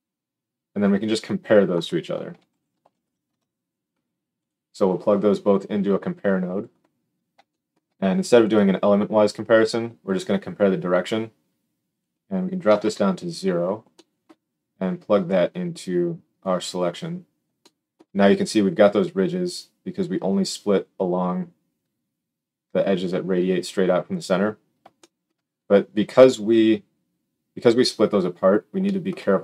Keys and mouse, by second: 4.4-5.4 middle drag, 5.4-29.4 drag.